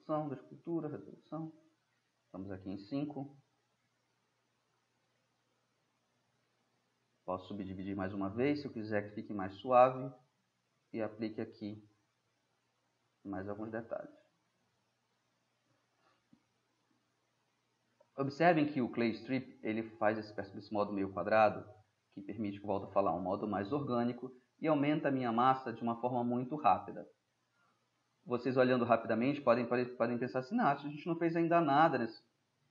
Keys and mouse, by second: 0.5-1.6 drag, 1.6-2.5 middle drag, 2.5-3.0 middle drag, 5.3-8.1 middle drag, 8.1-9.8 drag, 11.8-12.6 middle drag, 12.6 middle click, 13.2-15.5 middle drag, 15.5-16.3 drag, 16.3-18.5 middle drag, 19.3 drag, 19.4 middle click, 19.5 click, 19.7-20.3 middle drag, 21.6 middle click, 22.4-24.4 drag, 24.4 middle drag, 24.6-27.0 drag, 27.0-28.3 middle drag, 30.3-31.2 drag, 31.2-32.7 middle drag.